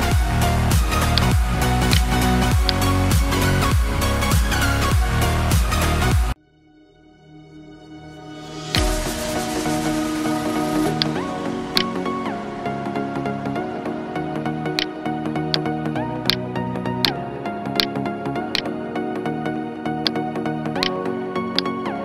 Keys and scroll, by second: 9.8 ctrl+space, 10.3 ctrl+space, 14.7 space, 17.7 space.